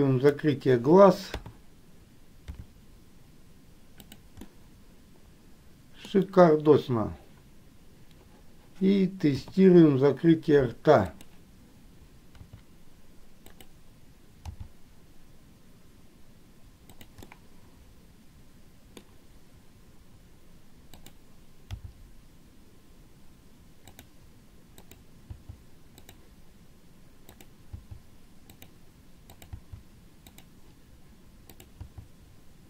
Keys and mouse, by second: 0.0 click, 1.5 KP_3, 2.7 r, 4.7-6.4 middle drag, 9.6 KP_3, 11.4 click, 12.7 r, 17.4-19.3 middle drag, 21.2 click, 25.1 click, 27.6 click, 29.6 click, 29.8 g.